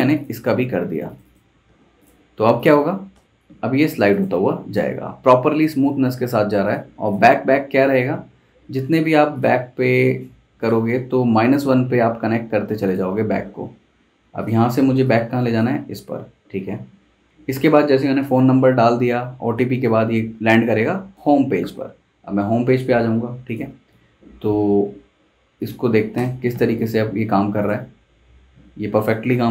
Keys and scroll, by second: 1.6 super+v, 3.1 super+Return, 17.2 super+z, 23.9 super+s, 26.2 super+Return.